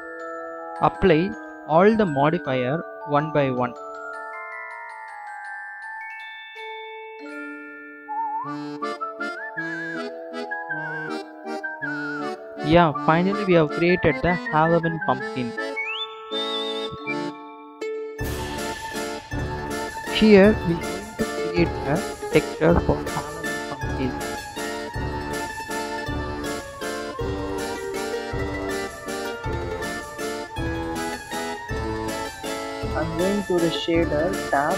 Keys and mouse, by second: 1.7-2.3 drag, 2.7 ctrl+z, 2.9-4.4 drag, 4.7-5.2 drag, 5.6 drag, 6.1 click, 6.5 click, 7.0 click, 7.5 click, 7.9 drag, 9.0 click, 9.4 Delete, 9.7 click, 9.8 Delete, 10.0 Delete, 10.3 Delete, 10.9 Delete, 22.4 click, 22.6 click, 22.9-24.5 drag, 30.5 click.